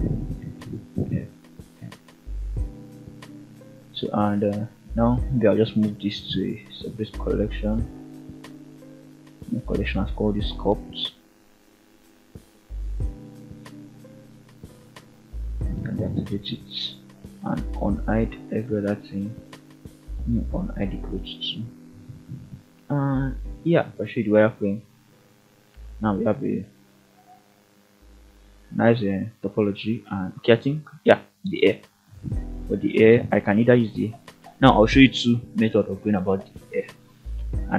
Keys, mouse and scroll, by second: 0.3 shift+middle click, 1.0 Tab, 1.8 click, 3.9 m, 13.3 click, 13.9 scroll down 3, 14.3 shift+middle drag, 14.8-15.6 scroll up 3, 16.0 alt+h, 16.6-17.1 scroll down 2, 17.1 alt+a, 18.4 click, 19.2-20.4 middle drag, 20.6-21.4 scroll up 1, 21.9-23.6 drag, 24.1-24.4 shift+middle drag, 24.6 scroll up 1, 24.7-25.3 middle drag, 25.6 shift+middle drag, 26.4-27.2 scroll up 2, 27.8 shift+middle drag, 28.7 click, 29.3 shift+middle click, 29.7-30.7 scroll up 2, 30.7 KP_3, 31.6-32.0 shift+middle drag.